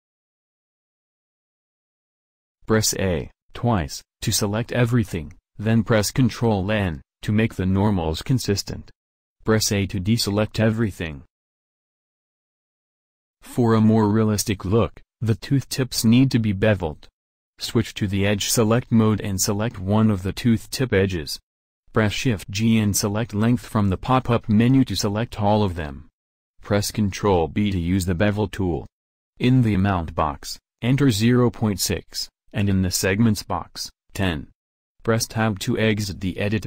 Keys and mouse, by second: 0.8 a, 3.0 w, 4.1 middle click, 4.3 middle click, 5.6 a, 5.9 a, 7.6 ctrl+n, 10.1 a, 16.3-22.6 drag, 22.6 shift+g, 25.8 click, 27.1 ctrl+b, 30.5-32.5 drag, 35.7 Tab.